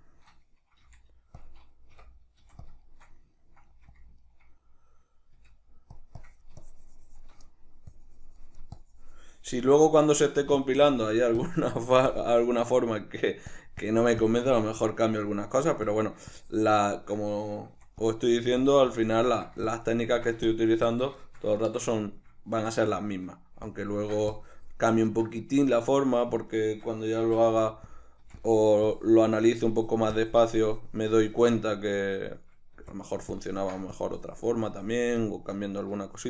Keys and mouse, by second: 0.8 f, 1.5 click, 2.0 i, 2.7 click, 2.9-4.0 shift+middle drag, 3.7 f, 4.0 click, 4.2-6.0 ctrl+middle drag, 5.4 f, 6.2-7.5 drag, 7.5 middle click, 8.0-9.8 drag, 9.8 shift+middle click, 10.4 f, 10.9-12.8 drag, 12.8 middle click, 13.6-15.0 drag, 15.0 middle click, 15.9-16.9 drag, 16.9-18.1 shift+middle drag, 17.8 f, 18.1 click, 18.4 f, 19.0-21.2 drag, 21.2-23.7 shift+middle drag, 23.7-25.5 ctrl+drag, 25.5-27.9 shift+middle drag, 27.2 shift+c, 27.9 click, 28.2 f, 28.9-31.7 drag, 31.7-33.0 ctrl+middle drag, 32.7 f, 33.4-35.3 ctrl+drag, 35.3-36.2 middle drag.